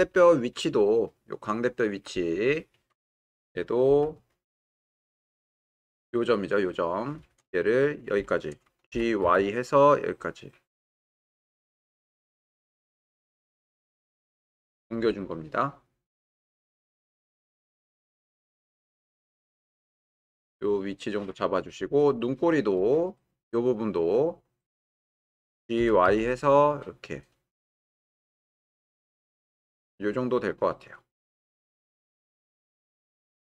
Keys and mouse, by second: 5.4 w, 6.3 click, 8.9 g, 9.2 y, 23.0 click, 25.8 g, 26.1 y, 32.3 click.